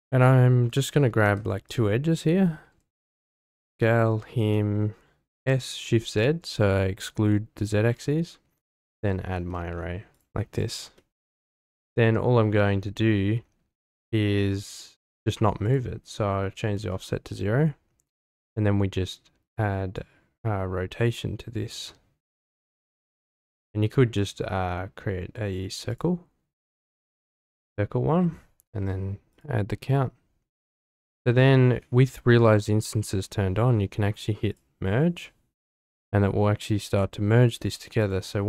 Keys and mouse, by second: 1.2 2, 1.7 click, 2.2 middle click, 3.0 shift+click, 3.6 s, 3.7 x, 4.4 click, 5.3 s, 6.0 shift+z, 7.6 click, 7.8 Tab, 8.7-10.2 drag, 10.9 middle drag, 15.7 click, 20.0-23.5 drag, 24.2-26.0 drag, 29.3 click, 30.7 click, 34.5 click, 35.7-36.5 middle drag, 36.7 middle click, 38.0-38.4 drag.